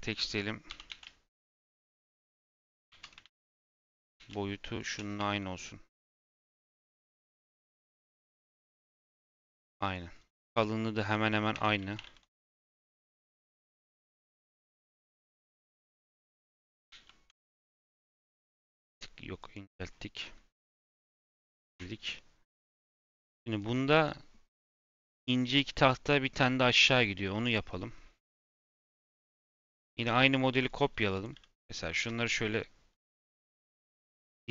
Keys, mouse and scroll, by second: 0.6 g, 2.0 Tab, 2.5 1, 3.4 click, 3.9 g, 5.1 Tab, 6.1 shift+click, 7.0 /, 7.6 click, 7.9 click, 8.6 KP_1, 11.5 Tab, 11.7 a, 11.9 s, 13.0 s, 15.1 middle click, 15.8 s, 19.6 Tab, 19.8-20.3 scroll down 1, 20.3 scroll down 3, 20.5 /, 21.5 KP_1, 28.6 shift+middle drag, 28.8-29.3 scroll up 6, 29.3-29.8 shift+middle drag, 29.8 shift+d, 31.1 click, 31.9 Page_Down, 32.4-33.0 scroll down 5, 33.0 KP_Decimal, 33.3-33.7 scroll down 7, 33.7-34.0 scroll up 1, 34.0 g.